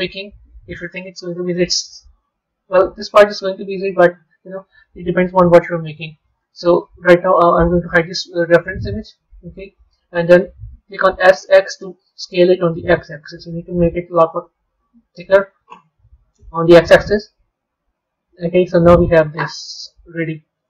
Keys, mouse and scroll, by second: 2.4 Tab, 3.1-7.4 middle drag, 8.5 click, 9.1-11.0 middle drag, 11.0 s, 15.9-19.0 middle drag, 20.5-20.6 middle drag.